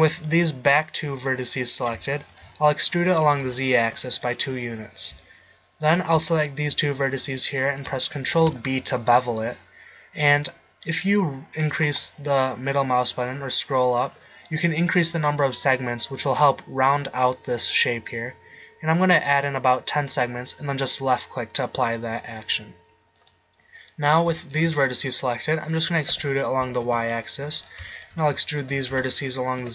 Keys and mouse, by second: 1.8-2.8 right drag, 3.0 middle click, 3.2 e, 8.4 ctrl+b, 22.2-23.3 middle drag, 23.3-25.8 right drag, 25.8 e, 28.8 e.